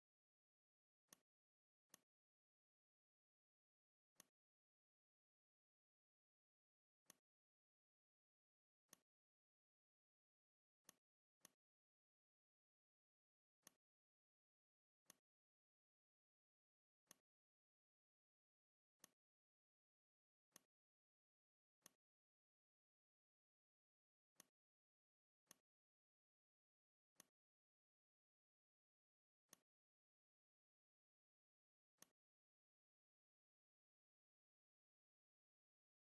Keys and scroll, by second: 1.7 z, 3.5 n, 8.4 v, 9.7 a, 29.2 z, 30.1 n.